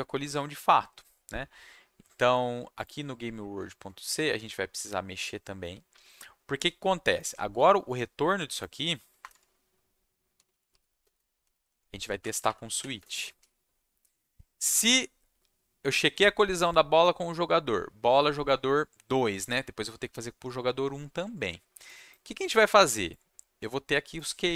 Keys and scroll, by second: 9.2 Return, 9.3 Tab, 10.1-11.4 typing, 12.1 shift+Down, 12.2 shift+Left, 12.3 shift+Left, 12.4 shift+Left, 12.9 space, 14.5 Left, 24.0-24.5 typing.